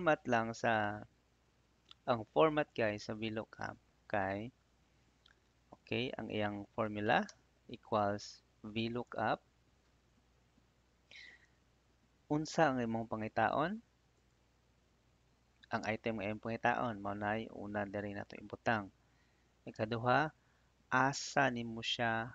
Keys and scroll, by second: 3.7 Tab, 5.6 =, 8.9 Tab, 18.2 '.